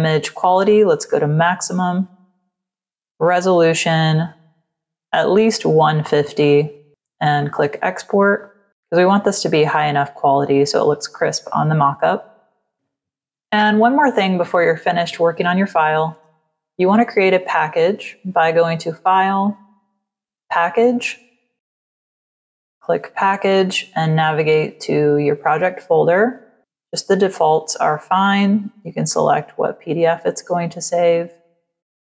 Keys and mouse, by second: 0.6 click, 2.5 click, 3.5 click, 6.3 click, 7.3 click, 18.2 click, 20.3 click, 22.0 click, 24.2 click, 28.4 click, 29.8 click, 31.6 click.